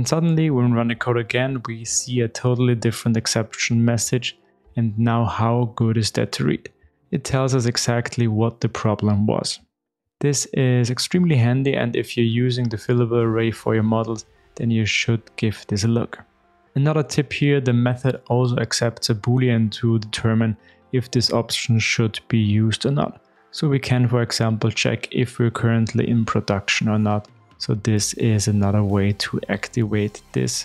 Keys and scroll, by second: 16.7 super+b, 21.3 super+e, 23.7 super+v.